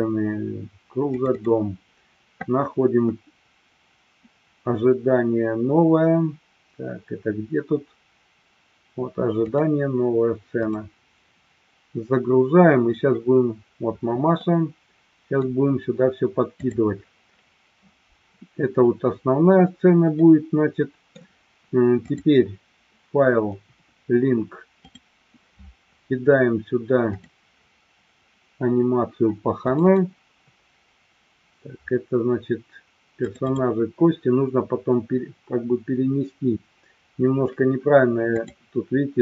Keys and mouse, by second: 14.4-15.5 middle drag, 16.6 click, 20.2 middle click, 22.1-25.1 drag.